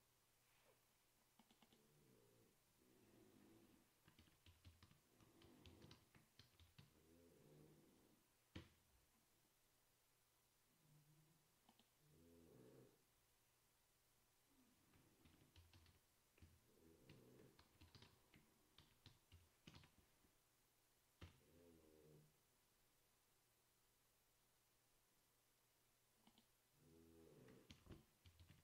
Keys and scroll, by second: 4.1-7.4 typing, 8.7 typing, 15.2-20.4 typing, 21.4 Return, 27.6-28.6 typing.